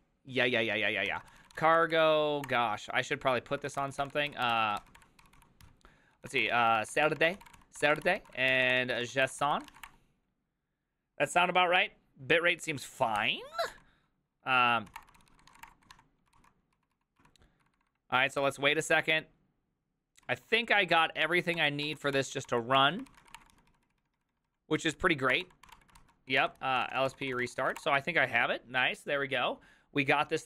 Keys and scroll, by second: 1.0-10.3 typing, 2.5 Return, 14.7-18.4 typing, 15.5 ctrl+:, 15.6 Return, 20.3-23.8 typing, 20.9 ctrl+d, 22.4 ctrl+d, 22.7 ctrl+d, 24.0 ctrl+u, 25.1-28.3 typing.